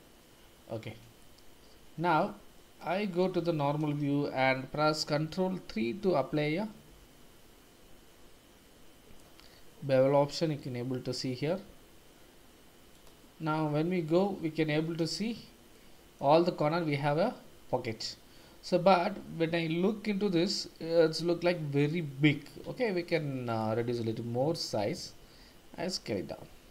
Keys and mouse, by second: 2.0 Tab, 2.5-3.2 middle drag, 3.6 shift+z, 5.7 ctrl+3, 13.0 click, 15.7-16.2 shift+middle drag, 16.6-18.0 middle drag, 21.4-21.9 middle drag, 22.9 shift+middle click, 23.7 Tab, 25.2 s.